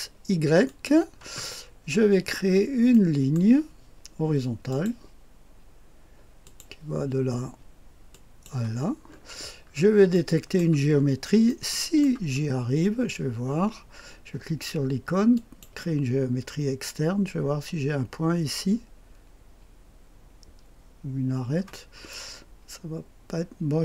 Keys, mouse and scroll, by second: 0.6 click, 1.5-2.2 scroll up 1, 2.2-2.8 scroll down 1, 2.8-3.9 middle drag, 4.6 click, 6.3 click, 8.0 click, 9.0-10.5 scroll up 3, 10.1-12.7 middle drag, 10.9-11.8 scroll up 2, 12.2-13.1 scroll up 2, 15.3 click, 21.8-22.7 scroll up 1.